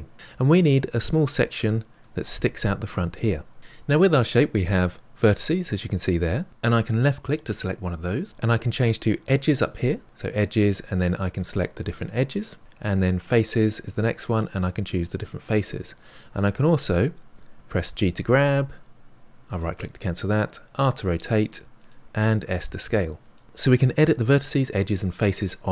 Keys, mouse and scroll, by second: 1.6-3.6 middle drag, 5.7 click, 10.0 click, 10.8 click, 11.4 click, 12.0 click, 13.2 click, 14.2 click, 14.8 click, 15.4 click, 17.9 g, 20.7 r, 22.3 s.